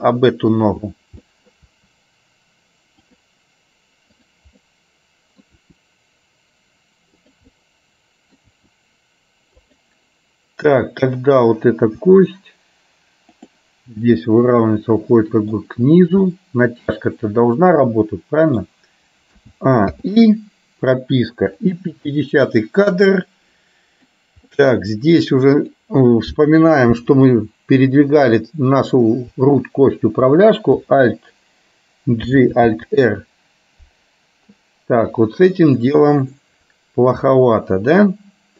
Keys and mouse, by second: 0.2 middle click, 1.3 middle click, 1.9 r, 4.7 middle click, 5.8 r, 7.6 middle click, 8.6 r, 12.2 r, 14.3-15.6 middle drag, 16.3 middle click, 18.1 middle click, 19.4 a, 20.1 i, 21.8 click, 22.7-24.2 middle drag, 24.6 middle click, 27.3 click, 32.4 alt+g, 32.8 alt+r.